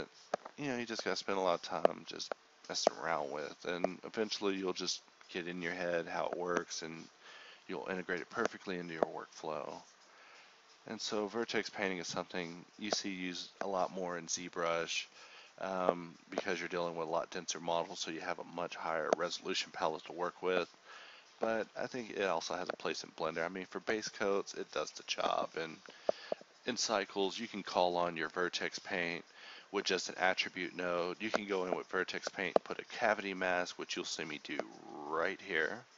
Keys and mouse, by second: 2.5 shift+k, 3.5 Tab, 3.8 Tab, 4.0 Tab, 5.0 alt+z, 5.8 Tab, 6.6 Tab, 8.1 ctrl+KP_Add, 9.3 Tab, 11.2 shift+k, 11.4 Tab, 12.5 Tab, 13.0 shift+k, 17.3 ctrl+z, 18.5 a, 24.9 ctrl+s, 25.3 KP_Divide, 25.8 a, 30.6 Home, 31.4 shift+a.